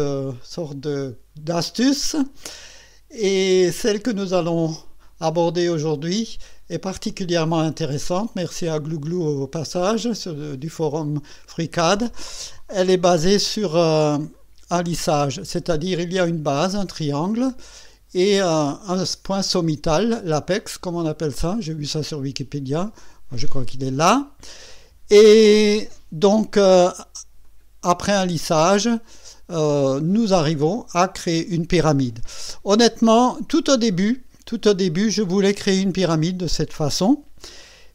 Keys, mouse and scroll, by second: 0.4-4.3 drag, 4.5 scroll up 2, 5.0-10.0 drag, 14.3 click, 15.1 space, 16.1-17.5 drag, 18.5 click, 19.0 space, 20.3-20.7 scroll up 2, 20.7-21.9 right drag, 22.1 scroll down 1, 23.4 click, 27.4 click, 27.9 space, 29.1-30.1 right drag.